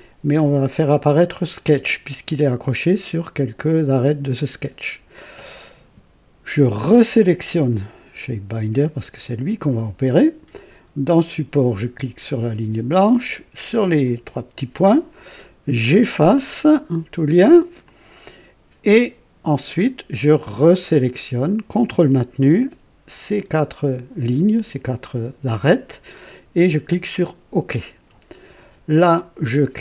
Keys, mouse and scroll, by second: 0.6 click, 1.7 space, 7.1 click, 12.2 click, 14.0 click, 16.2 click, 17.8-19.1 drag, 20.8 click, 22.5 ctrl+click, 23.6 ctrl+click, 24.7 ctrl+click, 27.2 click.